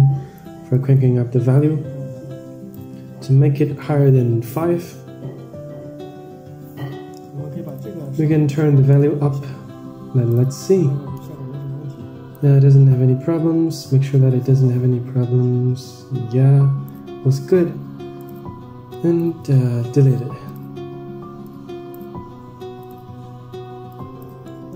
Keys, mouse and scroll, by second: 0.9 click, 1.8-3.0 drag, 3.7-5.2 drag, 7.9-12.1 drag, 12.5-17.3 drag, 18.4 click, 18.8 click, 19.7 Delete, 20.3 click, 22.7 click, 24.3 middle drag.